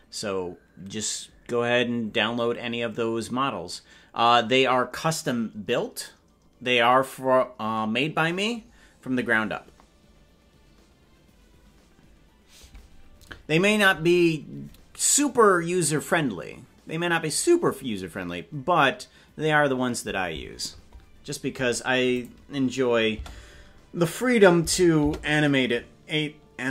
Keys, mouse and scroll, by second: 22.2 click, 24.6 space.